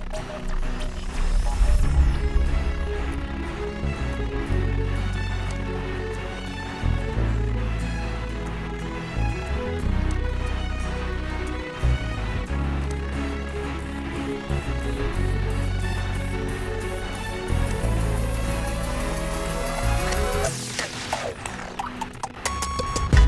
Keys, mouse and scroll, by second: 0.2 click, 5.8 click, 10.3 click, 17.4 click, 21.2 click.